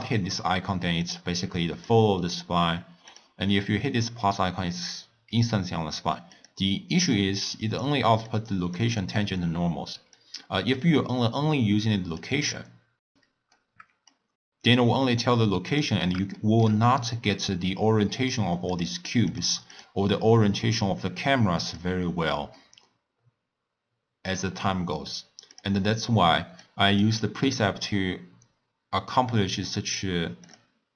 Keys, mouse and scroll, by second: 1.0-3.2 drag, 6.5 drag, 7.1-8.4 drag, 10.1 drag, 12.5-15.6 middle drag, 15.6 click, 16.3 shift+middle click, 16.8-17.2 scroll up 1, 17.2 scroll down 1, 17.3-18.6 middle drag, 18.6 click, 19.2 click, 19.7 click, 21.6 click, 22.5-25.5 middle drag, 25.5 click, 26.5-29.6 drag, 30.4 click.